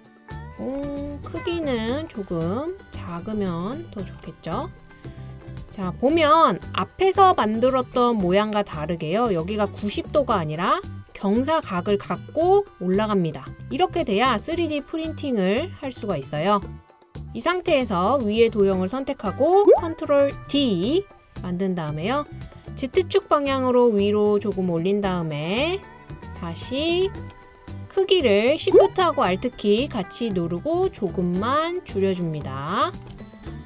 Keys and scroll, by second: 20.4 super+d.